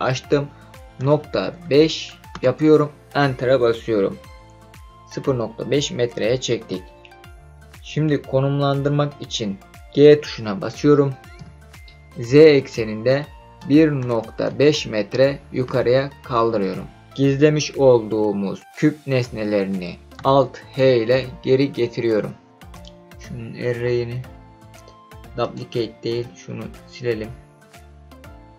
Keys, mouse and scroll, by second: 1.0 KP_Decimal, 1.6 KP_5, 2.3 KP_Enter, 11.3 g, 12.4 z, 13.6 KP_1, 14.0 KP_Decimal, 14.4 KP_5, 15.6 KP_Enter, 20.8 alt+h, 22.7 click, 25.4-28.5 drag.